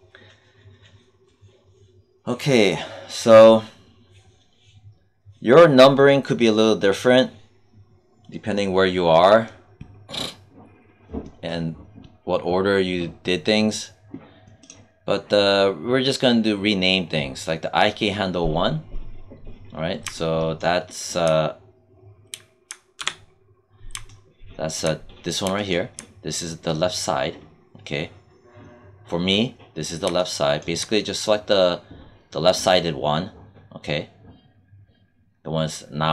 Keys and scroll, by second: 22.9 q.